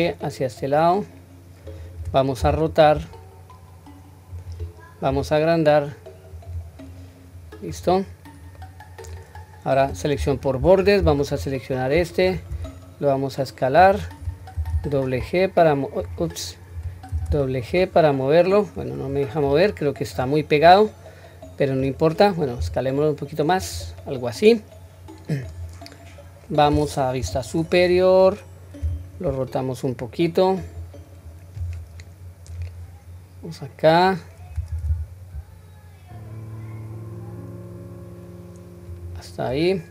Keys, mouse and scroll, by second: 6.8-7.8 middle drag, 8.1-8.6 scroll down 1, 8.6 middle click, 10.1 2, 11.2 alt+click, 12.5 s, 19.7 middle click, 20.6-21.9 middle drag, 22.6 s, 24.0-25.4 middle drag, 26.1-27.0 scroll up 1, 27.0 scroll up 1, 27.2 KP_7, 27.9-28.8 scroll down 1, 28.8 r, 32.5 click, 34.7 g.